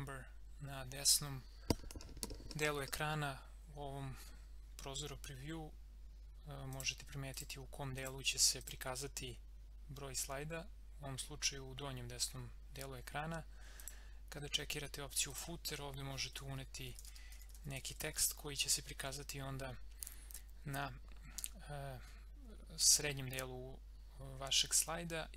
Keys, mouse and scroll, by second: 6.7 click, 13.8 click, 16.1-18.7 typing.